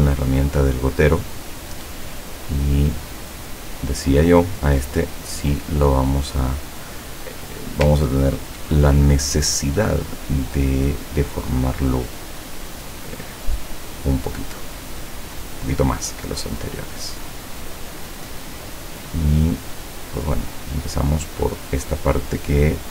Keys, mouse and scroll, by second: 0.1 click, 1.2 click, 3.1 click, 4.3 click, 15.1 click, 17.6 click, 19.8 click, 21.6 click.